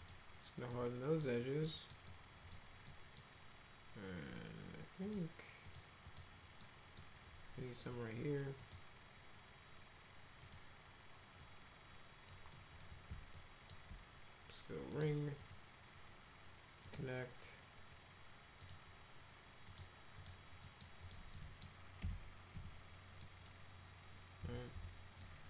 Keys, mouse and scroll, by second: 0.8 middle click, 1.6 middle click, 2.1 middle click, 2.9 middle click, 5.1 click, 5.7 click, 6.0 click, 6.6 middle click, 8.6 click, 10.5 click, 11.4-12.3 drag, 12.5 middle click, 13.4 ctrl+click, 14.9 click, 15.4 right click, 16.9 click, 18.6 click, 19.7 click, 20.2 click, 20.6 middle click, 21.1 click, 21.3 middle click, 22.0 F3, 22.6 F4, 23.2 middle click, 24.4 F4, 24.7 F4, 25.2 middle click.